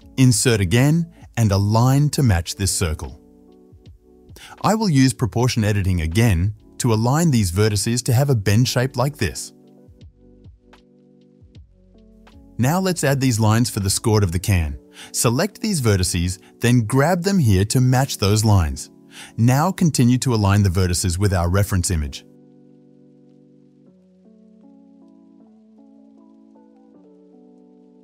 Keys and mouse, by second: 0.3 i, 4.6-6.0 drag, 6.0-7.2 middle drag, 6.3 1, 7.2 click, 7.4-12.0 middle drag, 8.5 g, 12.0-18.3 drag, 18.3 middle click, 18.5 o, 18.8-19.9 drag, 19.9 middle click, 20.1 click, 20.8 middle click, 20.9-22.2 drag, 22.1 middle click, 22.2 middle click, 22.3-28.0 drag.